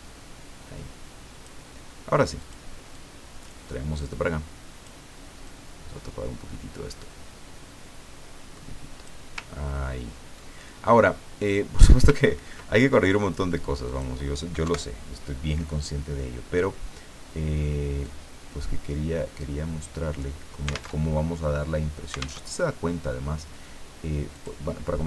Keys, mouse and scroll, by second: 2.4 click, 2.9-5.2 drag, 5.5-9.2 drag, 9.5-10.1 ctrl+scroll down 2, 12.2-12.6 ctrl+scroll up 2, 13.8 click, 14.6 Delete, 18.0-20.9 drag, 20.9 alt+Tab, 22.4 alt+Tab, 24.3 click.